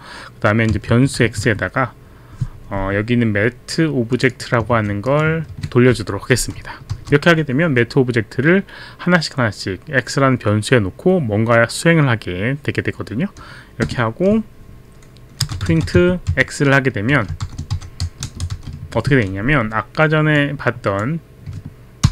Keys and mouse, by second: 0.5-2.1 typing, 4.1 click, 4.3 click, 5.1 click, 5.5 ctrl+v, 5.6 ctrl+v, 5.6 click, 13.8 Return, 15.1-18.5 typing, 20.4 click, 22.0 ctrl+Return.